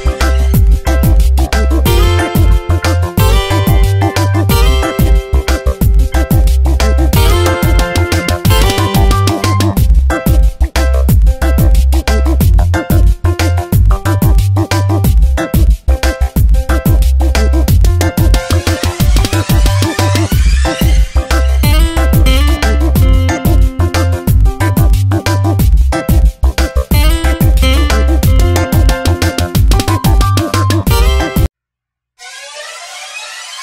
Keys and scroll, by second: 0.3 shift+-, 1.4 Tab, 2.9 e, 4.5 v, 10.8 space, 11.2 Tab, 29.5 space, 31.3 b, 33.3 e.